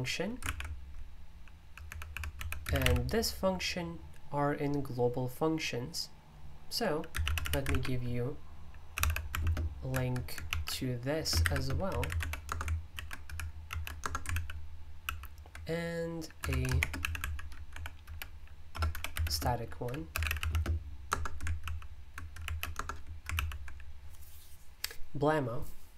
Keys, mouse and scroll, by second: 0.0-3.3 typing, 7.1-9.8 typing, 10.5 ctrl+v, 11.2-12.7 typing, 12.9 super+l, 13.7 ctrl+v, 14.0 Return, 14.3 super+l, 15.0 super+l, 16.4 Escape, 16.4-22.1 typing, 21.0 Return, 22.4 ctrl+v, 22.8 Return, 23.4 super+l.